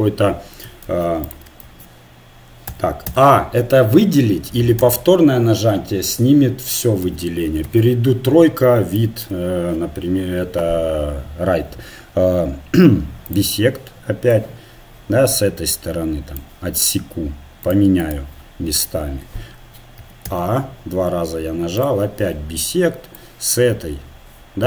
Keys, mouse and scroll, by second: 1.6 ctrl+a, 2.7 a, 3.0 a, 4.8 a, 7.0 a, 7.6 KP_3, 13.3-16.4 drag, 17.7-19.9 drag, 20.0 a, 20.2 a, 21.8-23.7 drag.